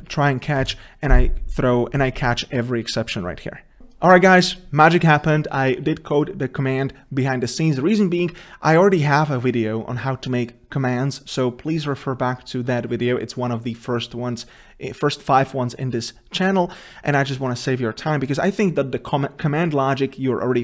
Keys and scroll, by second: 0.8 ctrl+s.